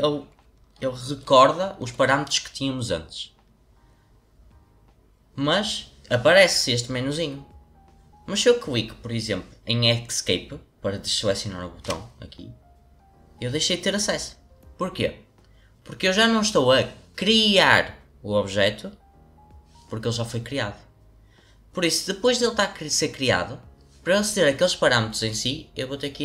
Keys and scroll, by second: 11.8 Escape.